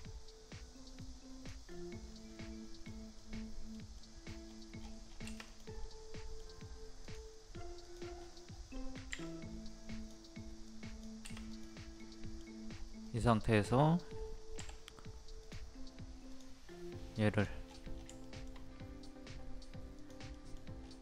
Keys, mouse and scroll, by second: 1.0 click, 1.7-4.0 middle drag, 4.4-4.8 scroll down 1, 5.5 click, 5.8 middle click, 6.4-7.0 scroll down 1, 7.0 click, 8.2 scroll up 1, 9.1 scroll up 1, 9.2-10.3 drag, 12.0 middle click, 12.7-13.1 scroll up 1, 13.1 middle click, 13.5-14.6 scroll up 1, 14.6 m, 15.4 click, 16.6 scroll up 1, 17.3 click, 17.7-18.0 scroll down 1, 18.2 shift+middle click, 20.0 click, 20.3 middle click, 20.8-21.0 scroll up 1.